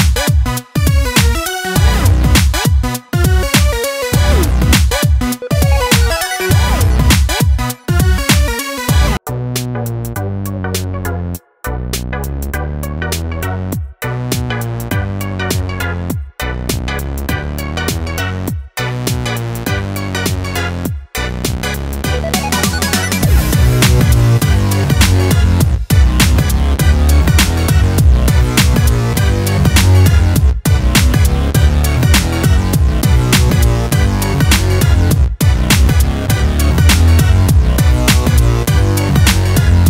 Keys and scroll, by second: 8.4 ctrl+space.